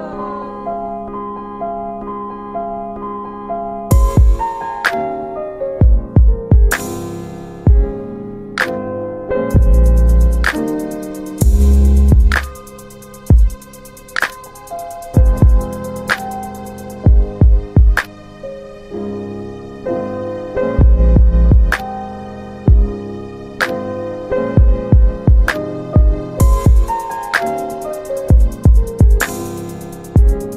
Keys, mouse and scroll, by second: 2.6 double click, 3.6 click, 4.6 alt+middle click, 5.3 click, 7.4 ctrl+click, 10.5 alt+middle click, 11.6 middle click, 11.6-12.1 scroll up 1, 12.5 alt+middle click, 16.2 alt+middle click, 21.6 click, 22.5 click, 23.5 alt+q, 24.0 1, 27.3 click, 28.1 alt+middle click, 29.5 click.